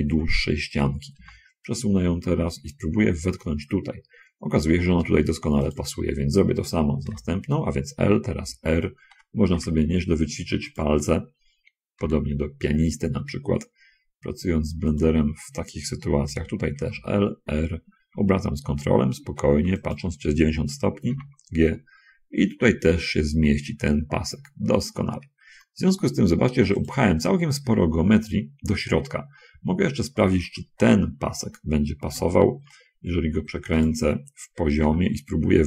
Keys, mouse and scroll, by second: 1.5 g, 6.0 click, 7.3 l, 8.3 r, 11.1 ctrl+click, 12.3 g, 15.3 click, 16.7 l, 20.2 ctrl+click, 21.5 g, 27.2 click, 31.0 l, 32.5 r, 33.9 ctrl+click, 35.2 g.